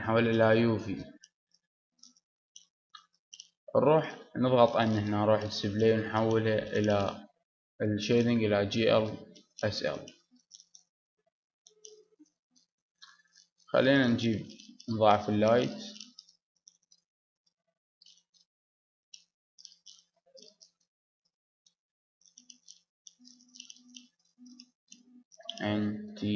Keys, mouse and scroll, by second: 2.4 click, 3.4 click, 3.9 n, 10.2 middle click, 10.7 Tab, 11.1 Tab, 11.4 middle click, 12.8 middle click, 13.0 middle click, 15.4 shift+d, 16.5-17.6 middle drag, 17.6-18.7 drag, 18.7 middle click, 19.6 right click, 20.3 shift+d, 22.3-24.6 drag, 25.0 click, 25.3 n, 26.0 t.